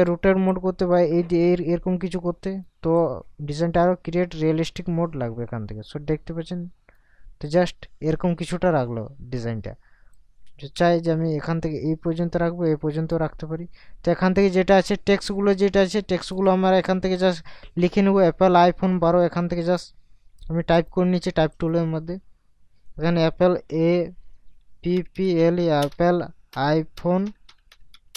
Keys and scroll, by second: 23.7 shift+a, 24.9 p, 25.8 space, 26.5 i.